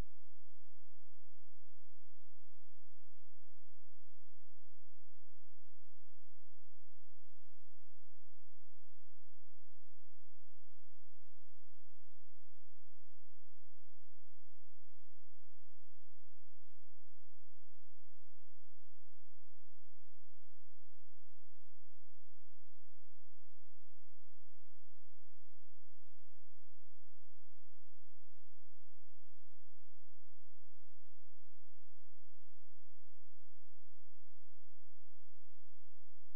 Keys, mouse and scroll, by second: 3.5 click, 7.7 click, 11.5 space, 12.6 click.